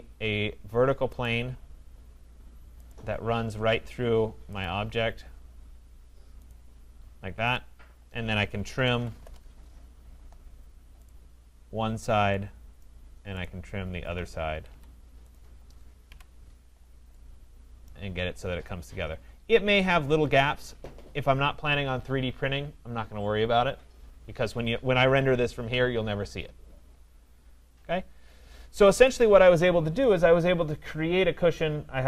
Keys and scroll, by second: 9.2 Return, 14.5 Escape, 16.1 Delete.